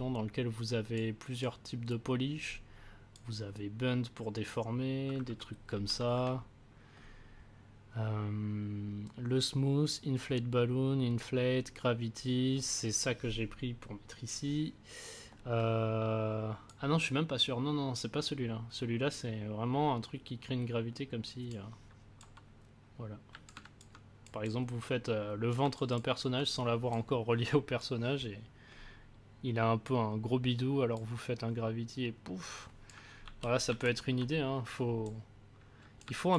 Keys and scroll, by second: 5.7 ctrl+z, 33.2 ctrl+z.